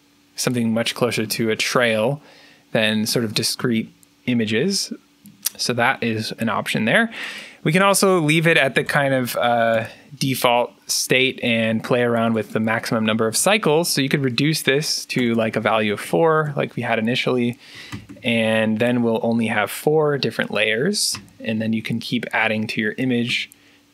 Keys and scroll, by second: 0.9-1.8 typing, 3.5 3, 8.5-9.2 typing, 9.6 Return, 13.3 0, 13.9 4, 15.0-18.3 typing, 21.0 3, 23.1 3.